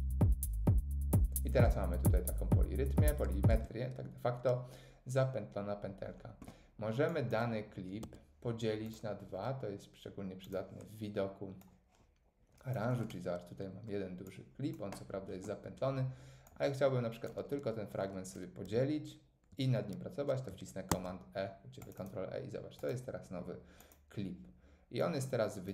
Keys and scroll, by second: 3.5 space, 8.0 Tab, 20.9 super+e.